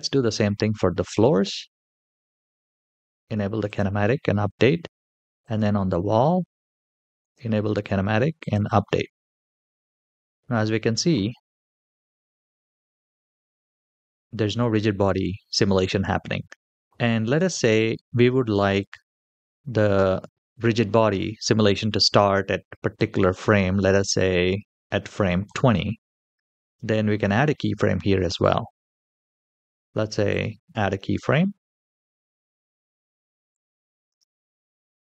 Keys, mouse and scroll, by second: 0.9 click, 2.0 click, 3.4 click, 5.9 click, 7.0 click, 8.2 click, 9.8 space, 16.5 space, 16.8 click, 22.8-25.4 drag, 30.1 click, 33.3 click, 33.9 space.